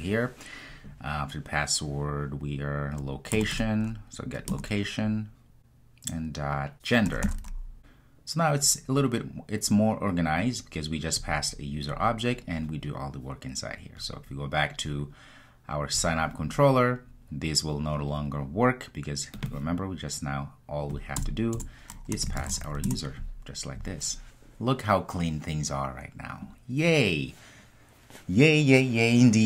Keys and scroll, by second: 4.5 Return, 22.9 Return.